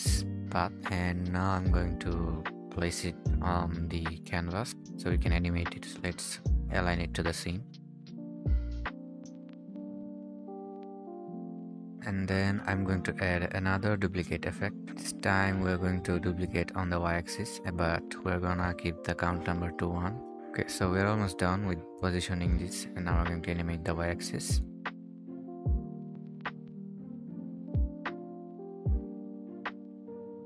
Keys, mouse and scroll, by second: 0.0-0.4 scroll up 1, 1.2-2.6 scroll down 1, 4.6 scroll down 1, 4.7 scroll up 1, 4.9 scroll down 1, 5.0-6.0 scroll up 1, 6.6-7.0 scroll down 1, 8.4-10.8 typing, 8.6 Escape, 8.6-8.9 scroll down 1, 9.5 right click, 9.7 right click, 10.0 scroll up 1, 10.1 scroll down 1, 11.1 Escape, 11.3 scroll down 1, 11.8-12.4 scroll down 1, 13.0 right click, 16.0 scroll down 1, 20.3-20.8 scroll down 1, 22.7-23.6 typing, 24.2 right click, 24.9 typing, 27.4 typing.